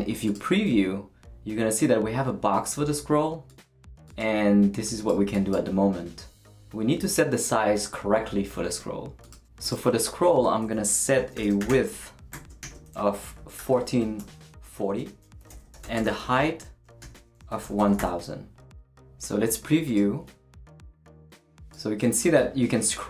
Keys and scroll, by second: 10.9-18.1 typing, 14.8 Right.